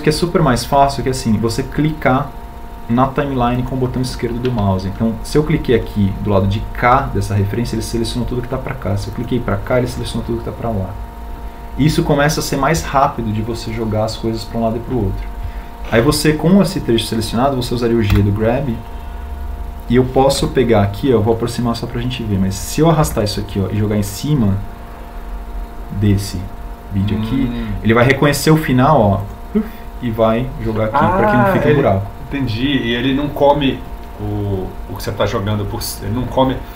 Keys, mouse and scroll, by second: 20.3 g, 25.2 g.